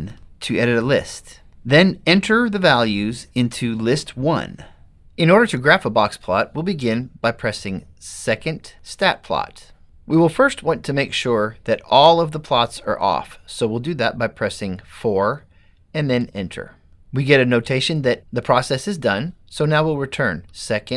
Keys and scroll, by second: 0.2 1, 15.2 4, 16.4 Return.